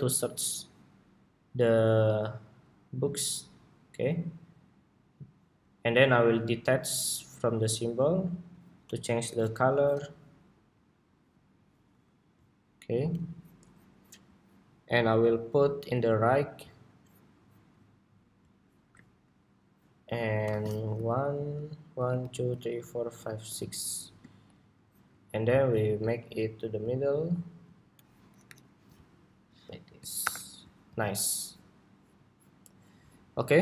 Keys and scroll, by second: 28.2 alt+Up, 29.9 super+-, 30.7 super+s.